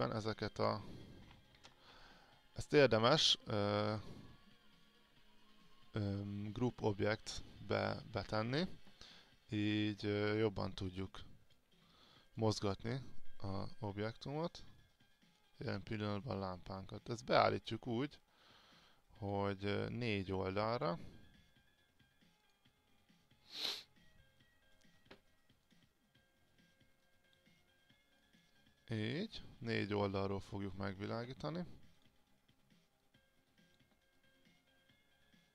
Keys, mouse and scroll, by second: 1.7 ctrl+z, 3.3 click, 4.2 right click, 7.0 click, 8.1 click, 11.1 alt+click, 12.4-16.0 drag, 16.2-17.4 alt+drag, 18.3 click, 24.1 alt+click, 25.7-28.3 drag, 29.5 alt+click, 32.1 click, 34.3-35.5 alt+drag.